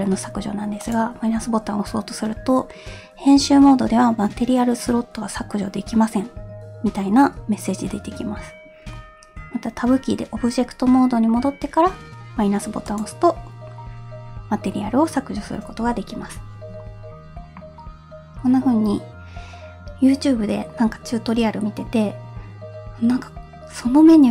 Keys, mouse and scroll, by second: 0.9-5.8 drag, 9.0 Tab, 12.9 click.